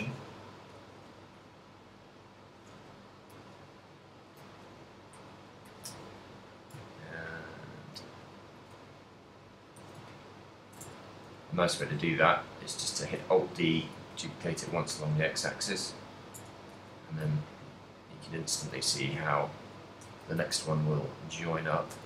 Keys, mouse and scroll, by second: 0.1 click, 0.6 e, 0.7 click, 0.7 r, 1.6 g, 2.7 click, 3.4 e, 4.4 r, 5.3 click, 5.3 g, 6.0 click, 6.0 a, 7.0 ctrl+click, 8.2 r, 8.7 g, 9.8 click, 10.2 ctrl+click, 10.2 a, 10.9 Tab, 11.6 alt+d, 13.2 click, 13.3 g, 14.9 click, 15.9 right click, 16.4 Tab, 16.8 a, 17.7 ctrl+click, 18.8 e, 19.9 click, 20.2 a, 20.3 a, 20.7 r, 21.8 click.